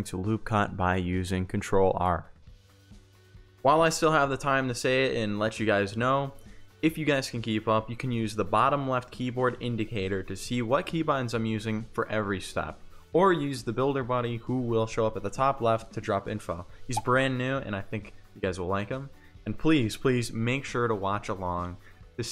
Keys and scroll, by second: 2.5 ctrl+r, 3.6 ctrl+r, 13.4 F3, 20.5 1.